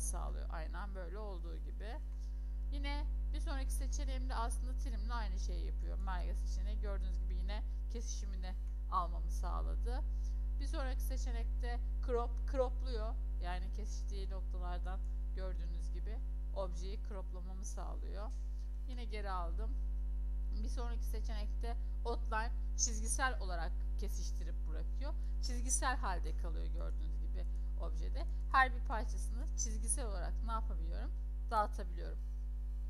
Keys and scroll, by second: 1.3 ctrl+z, 1.8 ctrl+z, 8.3 ctrl+z, 18.6 ctrl+z, 32.0 ctrl+z, 32.5 ctrl+z.